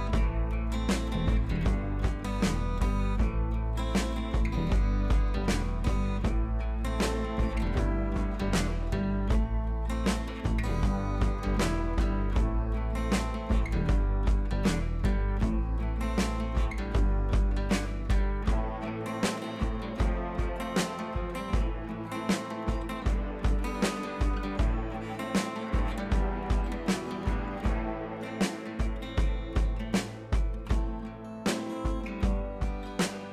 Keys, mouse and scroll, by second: 0.4 ctrl+Page_Up, 2.8-3.3 shift+drag, 4.0 Left, 6.6-9.0 drag, 7.5-8.1 click, 9.0 ctrl+z, 9.5-10.3 drag, 12.6-13.2 scroll down 1, 13.6 F4, 14.0 scroll down 1, 15.0-16.0 scroll up 1, 16.0-17.4 drag, 18.5-19.1 shift+click, 19.8-20.4 click, 20.8-21.8 scroll down 2, 21.9-22.5 click, 23.4-24.4 scroll down 2, 24.4 click, 32.4-33.3 scroll up 2.